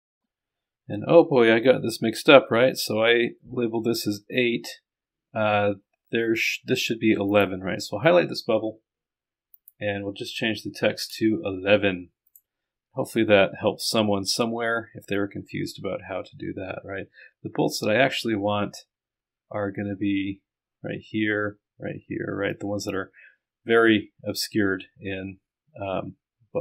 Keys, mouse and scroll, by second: 7.3 click, 9.6 click, 12.3 click.